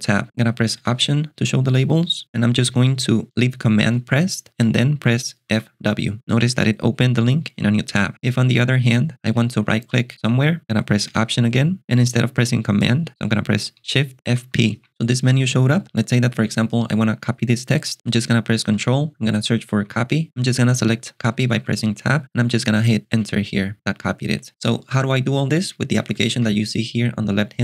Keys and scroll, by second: 0.9 alt+super+BackSpace, 5.4 super+f, 5.8 super+w, 11.2 alt+super+BackSpace, 14.0-15.0 typing, 18.8 super+space, 19.6-20.5 typing, 20.6 Tab, 21.5 Tab, 23.1 Return, 26.2 shift+super+[.